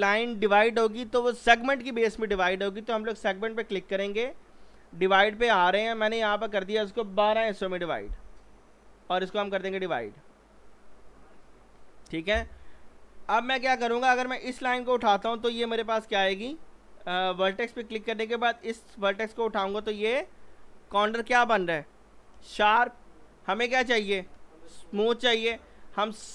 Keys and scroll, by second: 7.3 1, 7.4 2, 7.6 Return, 15.8 ctrl+z, 25.2 ctrl+z.